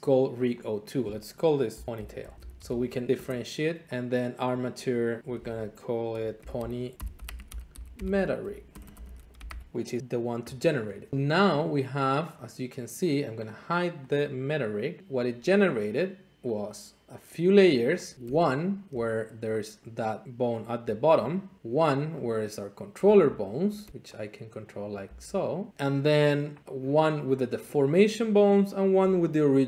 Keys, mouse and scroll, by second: 0.4-1.6 drag, 1.9-2.6 typing, 3.1 Return, 3.8-5.3 drag, 6.1 ctrl+shift+a, 6.4-9.8 typing, 11.1 scroll, 12.2 scroll, 13.5 click, 14.1 click, 15.0 click, 15.0-15.4 scroll, 15.6-15.9 scroll, 16.6 click, 17.3 click, 18.1 click, 18.3 Tab, 18.8 scroll, 19.4 middle click, 20.2 click, 21.6 click, 22.4 click, 23.1 r, 23.8 Escape, 24.9 click, 25.0 r, 25.7 Escape, 26.6-27.6 drag, 27.7-29.6 drag.